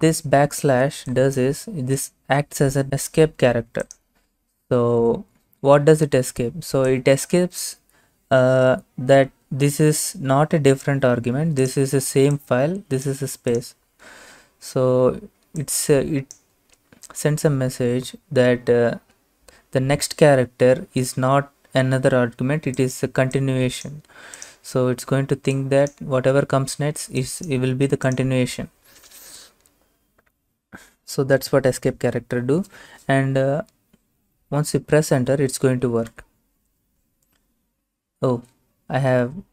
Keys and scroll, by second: 36.2 Return, 38.6 Up, 39.1 Left.